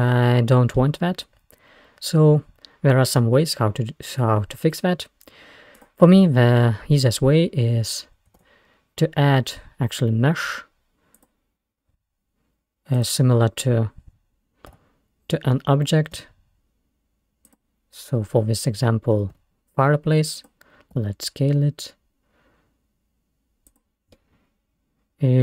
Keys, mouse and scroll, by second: 1.2-2.3 scroll down 4, 5.8 click, 8.4 shift+a, 13.0 click, 14.8 g, 19.2 g, 21.0 s, 24.2-25.4 middle drag.